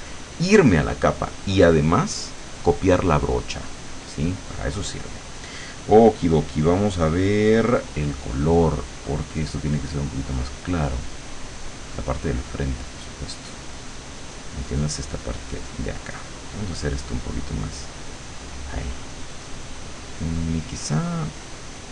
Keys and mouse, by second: 3.9 click, 9.1 click, 11.5-13.5 drag, 17.9-21.5 drag, 21.7-21.9 drag.